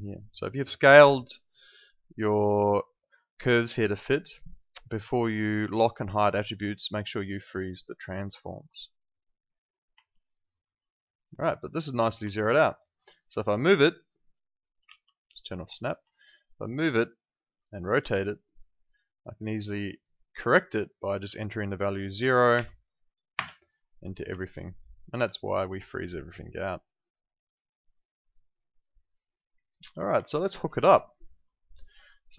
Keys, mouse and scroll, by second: 5.4 click, 10.0 alt+click, 10.3 alt+right click, 10.6 alt+middle click, 10.9 alt+click, 12.3 alt+click, 12.4 alt+right click, 12.8 alt+middle click, 13.5 click, 14.4 alt+click, 14.8 ctrl+z, 15.5 click, 15.8 alt+click, 17.7 e, 18.3 click, 22.5 0, 23.3 Return, 24.4 alt+click, 25.0 alt+right click, 25.2 alt+click, 25.7 alt+right click, 26.0 alt+click, 26.8 alt+middle click, 27.0 alt+right click, 27.2 alt+click, 27.6 alt+middle click, 27.9 alt+right click, 28.4 alt+click, 29.3 alt+middle click, 30.2 alt+click, 30.5 w, 30.9 alt+click.